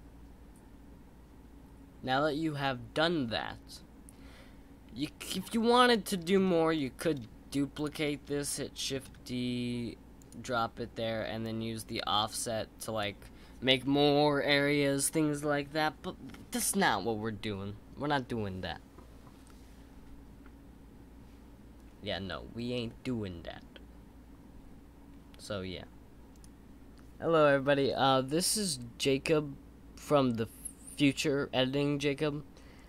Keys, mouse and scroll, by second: 5.2-6.2 scroll down 3, 6.2-6.7 scroll up 4, 6.7-7.7 scroll down 2, 7.7 click, 9.0 shift+d, 11.4-14.5 drag.